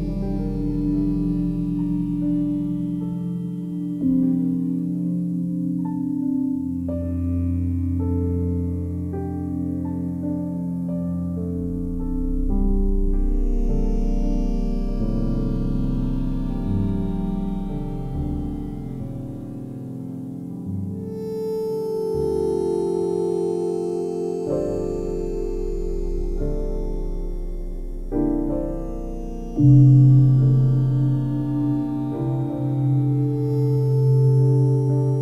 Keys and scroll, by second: 9.1 a, 14.1 Delete.